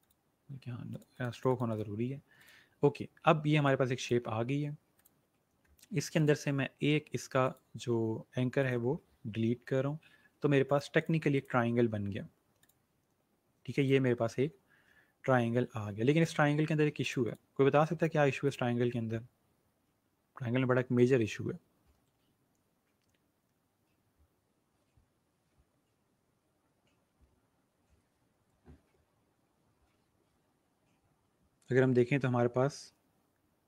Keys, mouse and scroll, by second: 3.2-3.6 alt+scroll up 2, 3.6 click, 10.6 click.